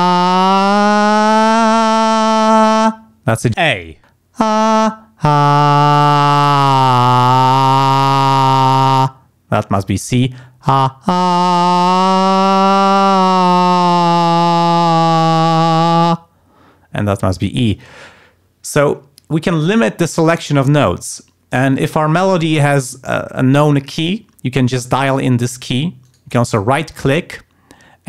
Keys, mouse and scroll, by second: 26.0 right click.